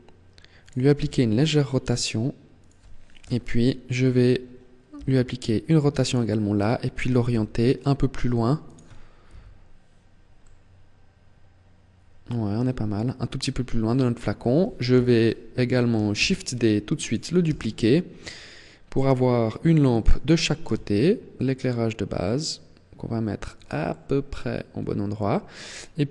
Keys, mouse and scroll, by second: 0.4 click, 0.6 r, 2.8 KP_7, 3.6-4.0 scroll down 2, 4.6 r, 5.8 click, 7.0 g, 8.4 click, 9.0 KP_1, 10.2 middle click, 14.6 KP_7, 16.1 shift+d, 16.7 click, 17.1 r, 19.6 click, 20.3 g, 23.2 click, 23.6 middle click, 26.0 click.